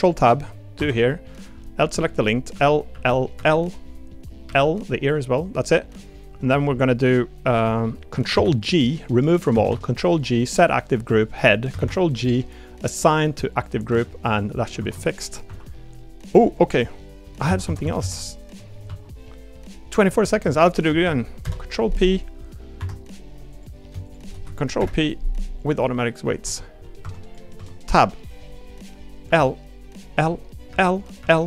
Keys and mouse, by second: 0.0 click, 0.7 Tab, 1.9 middle click, 2.5 l, 2.9 l, 4.4 l, 5.1 middle click, 7.5 middle click, 8.3 ctrl+g, 9.6 ctrl+g, 13.9 Tab, 14.3 click, 14.8 ctrl+Tab, 15.5 r, 16.6 click, 17.5 ctrl+z, 17.6 ctrl+z, 18.0 ctrl+z, 18.3 click, 18.9 Tab, 20.6 shift+click, 21.4 ctrl+p, 24.8 ctrl+p, 26.4 Tab, 26.8 middle click, 27.0 Tab, 27.2 click, 27.5 Tab, 29.3 l, 30.2 l, 31.2 click.